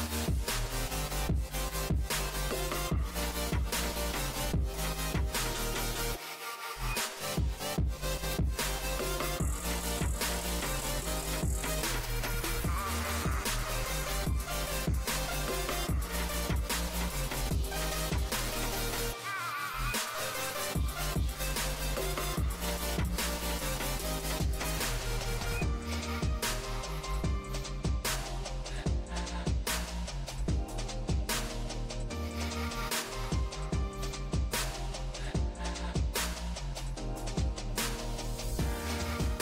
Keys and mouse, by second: 1.4 Tab, 8.2 shift+s, 9.9 shift+a, 11.9-15.7 middle drag, 15.7-17.0 right drag, 17.0 click, 17.9-19.4 middle drag, 20.1-25.1 middle drag, 25.1-36.2 right drag, 36.5 middle click, 37.4 s.